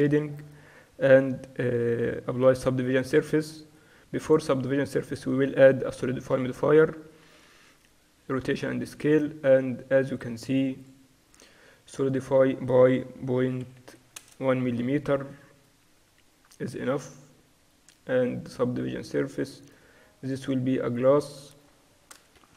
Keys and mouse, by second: 0.1 Tab, 2.0 ctrl+2, 3.1-6.4 drag, 7.6 ctrl+a, 10.9-15.2 drag, 13.9 0, 17.1-22.5 drag.